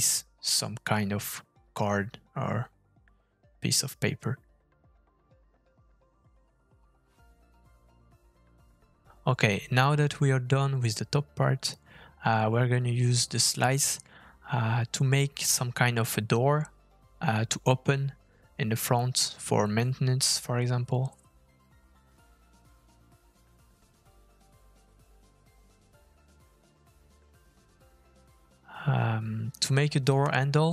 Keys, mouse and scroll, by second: 1.0 middle click, 1.2 scroll up 2, 1.4 scroll down 1, 1.5 shift+middle click, 1.8-2.2 scroll down 3, 2.5 click, 2.7 click, 2.9 click, 3.1 click, 3.2 middle click, 3.4 Tab, 4.4 k, 6.0 Tab, 6.4 click, 6.8 g, 8.0 Tab, 8.0 middle click, 8.4 middle click, 8.8 click, 9.0 middle click, 9.2-9.6 scroll up 3, 9.6 f, 10.4 middle click, 14.0 middle click, 14.6 middle click, 14.7-15.3 scroll down 4, 15.1 middle click, 15.3 scroll up 2, 15.4 shift+middle click, 15.8-16.2 scroll down 3, 16.0 middle click, 16.2 click, 16.4 middle click, 16.9 shift+middle click, 17.2 middle click, 17.4 click, 18.2 f, 20.1 middle click, 29.6 middle click, 30.1-30.7 scroll up 1.